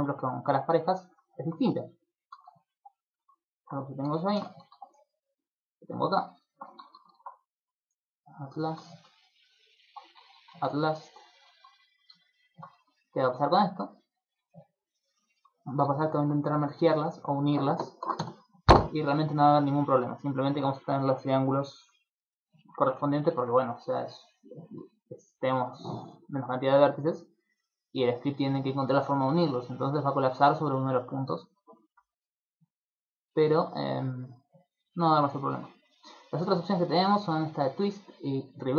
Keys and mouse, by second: 0.1 shift+right click, 0.5 shift+right click, 0.9 shift+right click, 1.3 middle click, 2.3 shift+d, 3.3 click, 3.4 shift+middle click, 4.3 shift+d, 5.4 click, 5.8 right click, 6.2 shift+right click, 6.4 right click, 7.2 alt+m, 9.2 right click, 9.6 shift+right click, 9.8 shift+right click, 10.6 alt+m, 11.8 alt+right click, 12.3 alt+shift+right click, 13.4 click, 14.3 click, 15.3 middle click, 15.8 ctrl+middle click, 16.0 shift+middle click, 17.3 click, 19.8 middle click, 21.7 middle click, 22.4 middle click, 22.8 ctrl+middle click, 23.1 shift+middle click, 26.0 click, 28.0 middle click, 28.5 ctrl+middle click, 28.8 middle click, 29.2 shift+middle click, 31.4 middle click, 32.7 click, 33.7 click, 34.0 click, 36.1 click.